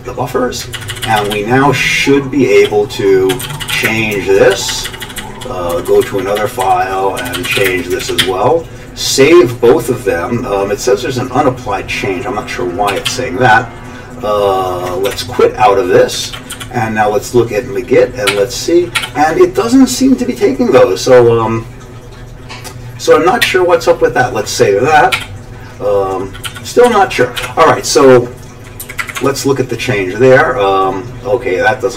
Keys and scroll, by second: 0.7 ctrl+n, 0.9 ctrl+n, 1.0 ctrl+n, 1.2 ctrl+n, 1.3 ctrl+f, 1.6-4.2 typing, 2.8 ctrl+f, 4.5 ctrl+n, 4.9 ctrl+n, 5.0 ctrl+n, 5.2 ctrl+n, 5.3 ctrl+n, 5.7 ctrl+n, 5.9 ctrl+n, 6.0 ctrl+n, 6.2 ctrl+n, 6.4 ctrl+n, 6.6 ctrl+n, 6.9-8.2 typing, 8.2 ctrl+s, 12.9 ctrl+x, 13.1 ctrl+s, 15.1 q, 16.2 ctrl+x, 16.5 g, 18.3-19.0 typing, 23.4 typing, 25.1 typing, 26.2-27.9 typing, 28.8 Up, 29.0 Up, 29.2 Tab.